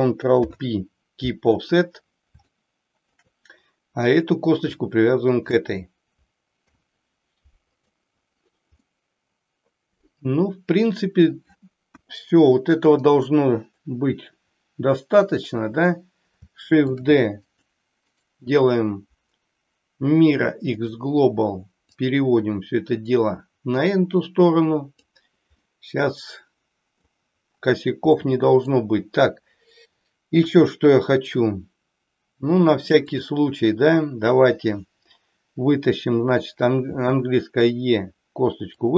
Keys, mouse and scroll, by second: 0.4 ctrl+p, 2.6 shift+middle click, 4.1 click, 5.3 shift+click, 6.6 ctrl+p, 8.8-11.3 middle drag, 12.0 KP_1, 13.0 click, 16.8 shift+d, 17.4 click, 18.1-21.1 right drag, 21.9-24.9 drag, 25.6-27.1 middle drag, 28.2 middle click, 30.3 KP_1, 32.9 click, 36.9 e, 38.8 click.